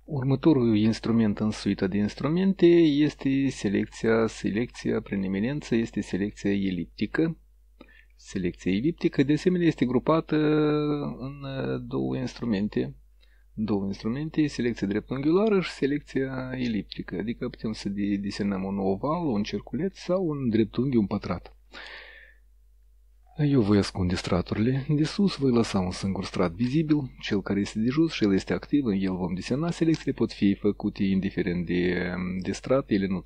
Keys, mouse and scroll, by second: 3.0-5.7 drag, 12.5 right click, 21.8 click, 24.7 click, 25.3 click.